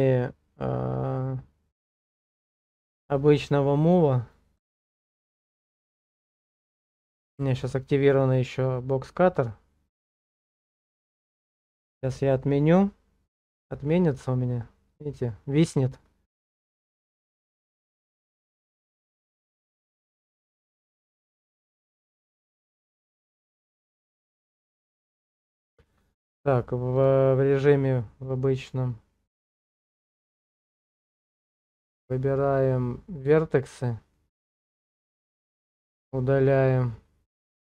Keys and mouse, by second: 24.4-25.5 drag, 28.7-33.7 drag.